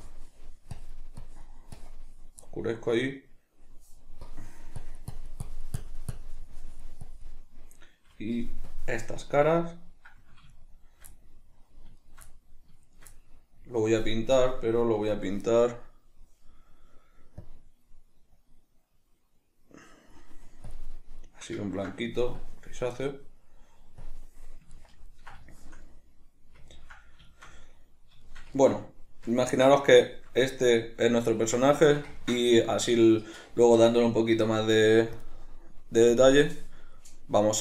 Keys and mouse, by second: 2.5-4.3 middle drag, 4.3-9.4 drag, 9.4 right click, 10.5 shift+right click, 11.1-12.0 middle drag, 12.0 shift+right click, 12.3 middle click, 12.9 shift+right click, 13.1-14.4 middle drag, 14.4-16.2 drag, 16.2-17.4 middle drag, 17.4-21.2 drag, 21.2-22.4 middle drag, 22.4-24.7 drag, 24.7-35.2 ctrl+middle drag, 35.2-37.6 drag.